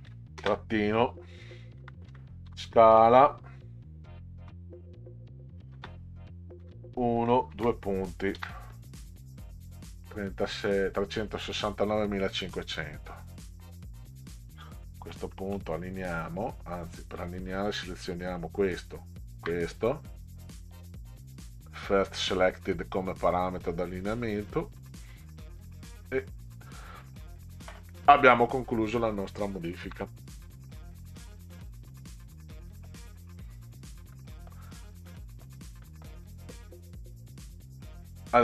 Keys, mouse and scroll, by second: 0.1 ., 0.4 space, 1.8 s, 2.1 c, 2.9 l, 5.7 space, 6.7 1, 7.5 shift+., 8.4 ctrl+v, 12.8 click, 15.0 Left, 15.3 Left, 17.2 click, 18.7 shift+click, 20.6 click, 22.1 click, 25.1 click, 26.7 click, 29.4-29.9 ctrl+scroll down 2, 31.3-32.9 middle drag, 34.1 middle click, 35.1-35.5 middle drag, 35.9 middle click, 37.5 click.